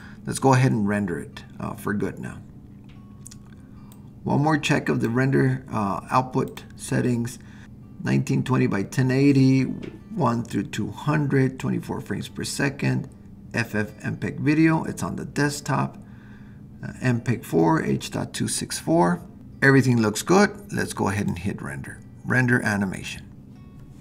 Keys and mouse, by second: 4.1 click, 6.5 click, 21.2-24.0 drag.